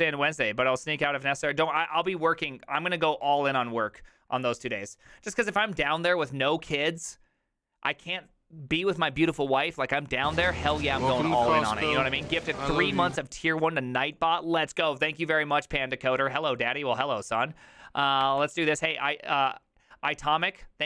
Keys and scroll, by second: 18.3 alt+f.